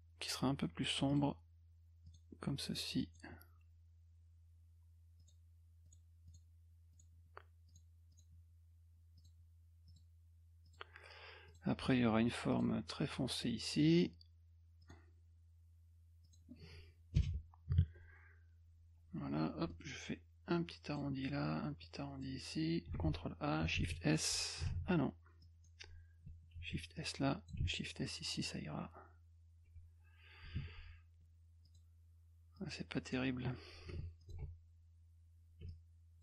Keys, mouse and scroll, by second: 1.1 click, 2.1 click, 3.0 click, 5.2 click, 5.8 click, 6.3 click, 6.9 click, 7.7 click, 8.1 click, 9.2 click, 9.9 click, 10.6 click, 11.5 click, 12.5 click, 13.0 click, 13.9 click, 14.8 click, 16.2 click, 17.1 Return, 19.3 F2, 19.7 middle click, 20.5 click, 21.8 click, 23.7 shift+s, 24.8 z, 25.4 click, 26.5 shift+s, 27.0 click, 27.7 s, 31.6 click, 32.6 click, 34.2 ctrl+alt+click, 35.7 shift+click.